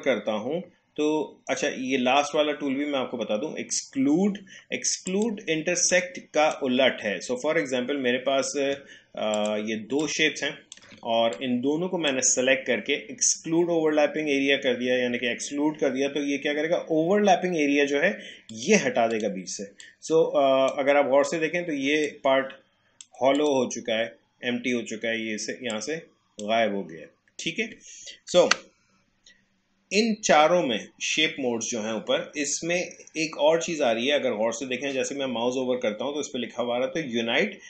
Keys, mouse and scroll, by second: 5.1-9.3 drag, 10.0-11.3 alt+drag, 11.3-14.6 drag, 18.5-23.4 drag, 25.7-28.5 drag, 28.5 Delete.